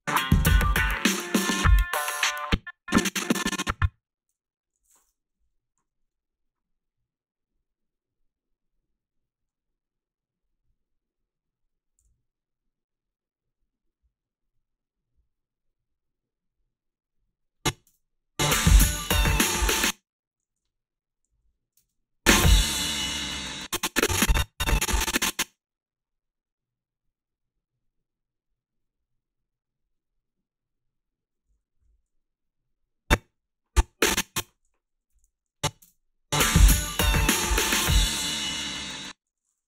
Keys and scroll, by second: 2.3 space, 4.3 g, 5.4 Delete, 12.0 f, 17.9 space, 19.6-21.8 typing, 23.4 space, 33.4 i, 34.9-35.8 typing, 38.8 space.